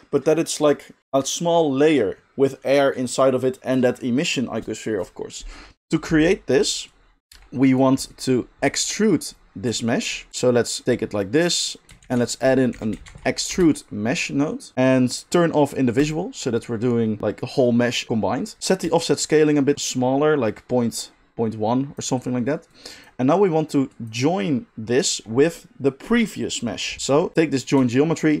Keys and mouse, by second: 7.3 g, 7.8-8.9 middle drag, 9.4 middle click, 10.3-14.7 drag, 12.0 shift+a, 14.7-16.0 middle drag, 16.0 click, 16.1-18.9 middle drag, 18.9-27.3 shift+drag, 27.3-28.4 middle drag.